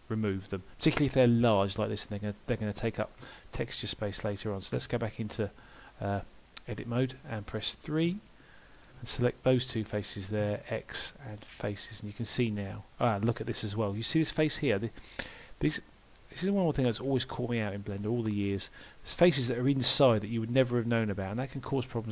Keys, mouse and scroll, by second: 2.0 middle click, 3.2 3, 4.8 Tab, 5.8 middle click, 8.1 3, 8.8 click, 9.6 shift+click, 10.4 x, 11.9 middle click, 15.0 middle click, 16.0-16.7 scroll up 2, 16.5 middle click, 17.1-18.1 scroll up 1, 18.1 middle click.